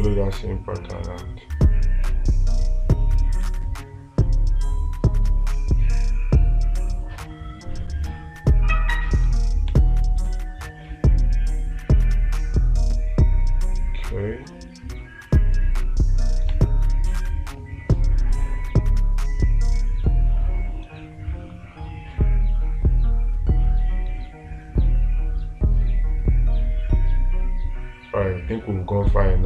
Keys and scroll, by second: 10.2 space, 17.0 space.